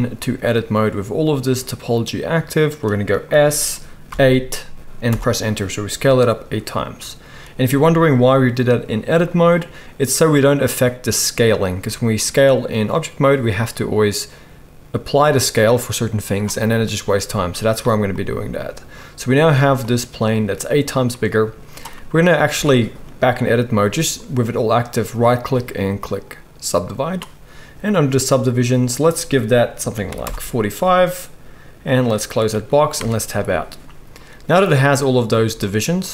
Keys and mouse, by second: 3.3 s, 11.8 Tab, 22.6 Tab, 25.1-27.2 middle drag, 25.1-27.2 right drag, 30.8-31.4 drag, 30.8-31.4 middle drag, 30.8-31.4 right drag, 32.0 middle click, 33.0 Tab, 35.2-35.5 middle drag, 35.5 z.